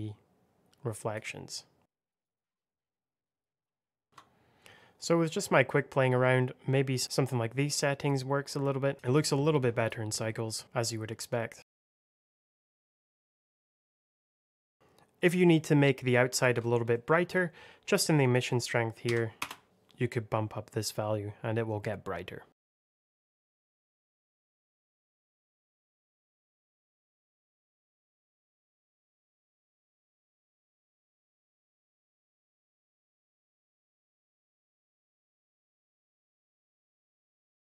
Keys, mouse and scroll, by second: 1.4 click, 2.1 KP_1, 2.2 Return, 2.8 click, 3.1 click, 3.3 click, 3.5 click, 5.2 middle click, 5.8-6.5 scroll up 1, 6.7 scroll down 1, 7.0 KP_0, 7.5 click, 11.6 click, 11.7-14.3 typing, 11.8 middle click, 11.8 shift+click, 12.2 middle click, 12.4 click, 12.4 middle click, 12.6 scroll down 1, 12.7 click, 12.8 click, 13.0 Escape, 13.0 middle click, 13.7 click, 13.9 middle click, 14.0 click, 14.2 alt+middle click, 14.3 click, 14.5 click, 16.8 middle click, 17.2 scroll up 1, 18.1 click, 18.9 KP_2, 19.3 Return, 22.5 click, 22.8 KP_4, 23.0 click, 23.1 Return, 23.4 click, 23.9 shift+middle click, 24.0 scroll up 1, 24.1 click, 24.2 KP_0, 24.4 alt+middle click, 24.5 g, 24.6 click, 24.8 click, 24.9 Return, 25.0 g, 25.8 scroll down 1, 26.1 click, 26.2 Return, 26.4 scroll down 1, 26.7 click, 26.7 Delete, 26.8 click, 27.0 Return, 27.3 click, 27.5 alt+middle click, 27.6 shift+middle click, 27.7 g, 27.9 Escape.